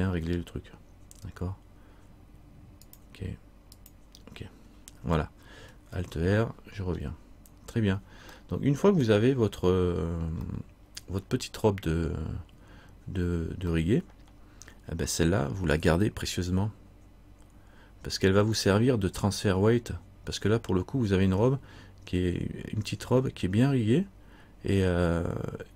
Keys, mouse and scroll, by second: 3.0 click, 4.0 click, 6.1 alt+r, 6.9 scroll down 1, 8.5 middle click, 10.7 middle click, 13.9 middle click.